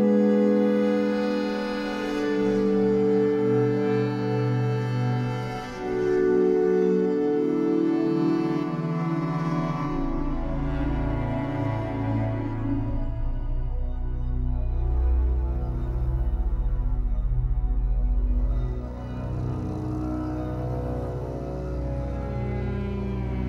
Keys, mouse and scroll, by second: 0.4 click, 0.7-2.0 middle drag, 2.0-2.6 scroll up 7, 2.2 Tab, 3.0 click, 3.5 a, 3.7-4.4 scroll down 5, 4.4 click, 4.8 z, 5.0 b, 5.6 s, 7.2 s, 8.9-9.8 scroll up 5, 9.8 shift+middle click, 10.1 z, 10.4 middle click, 10.6 Tab, 11.1 Tab, 11.3-12.7 middle drag, 12.7 alt+n, 13.3 Tab, 13.6 middle click, 14.1 Tab, 14.2 middle click, 14.9 click, 16.0 l, 16.9 alt+n, 17.6 Tab, 18.0 ctrl+s, 18.3 click, 18.5 scroll down 5, 18.8-19.2 middle drag, 19.2-19.6 scroll up 4, 19.6 middle drag, 19.9 Tab, 20.1-20.4 scroll down 6, 20.4-22.4 typing, 20.5-20.9 scroll up 1, 21.1 click, 21.7-22.0 scroll up 2.